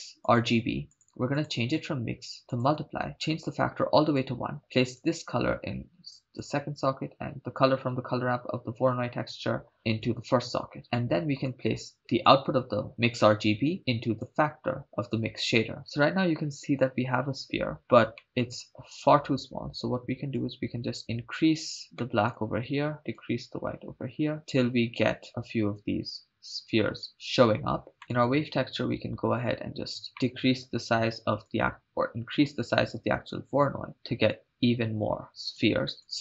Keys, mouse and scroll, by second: 1.3-2.8 drag, 3.4 click, 5.0-6.5 drag, 7.6 click, 9.6 click, 10.1-10.8 drag, 11.0 middle click, 12.3 click, 12.4-14.8 drag, 15.8 KP_0, 18.2 middle click, 20.4-21.8 drag, 22.0 middle click, 23.1-27.1 drag, 28.1-30.1 drag, 30.1 scroll up 1, 30.2 middle click, 31.5-35.7 drag, 35.9 click.